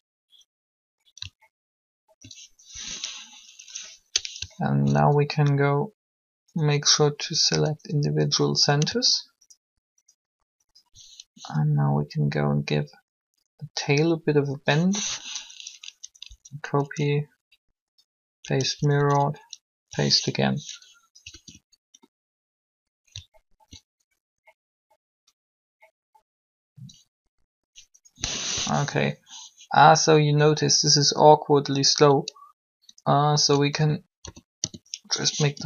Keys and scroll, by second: 11.3 shift+r, 15.8 Up, 18.7 Up, 21.3 alt+a, 28.5 3, 33.7-35.6 typing.